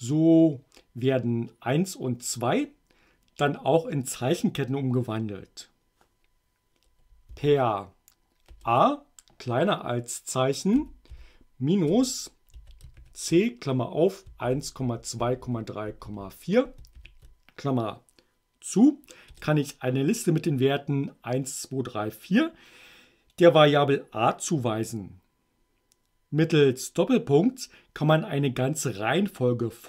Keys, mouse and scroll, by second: 7.3 a, 10.7-17.0 typing, 19.3 Return.